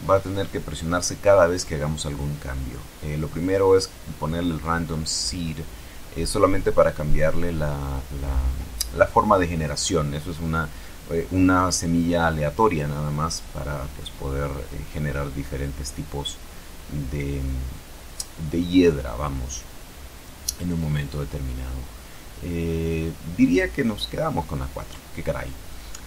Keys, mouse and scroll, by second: 0.6 middle click, 0.7-1.3 scroll down 2, 3.2 click, 4.0-4.4 scroll up 2, 7.4 click, 10.1 click, 11.6 click, 13.4 click, 14.8 click, 20.3 click, 21.3 click, 22.9 click, 24.6 click.